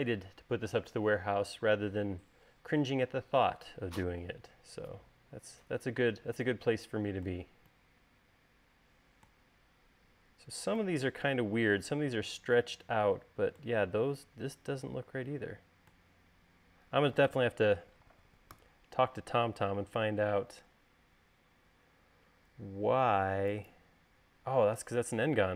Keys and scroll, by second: 19.4 u.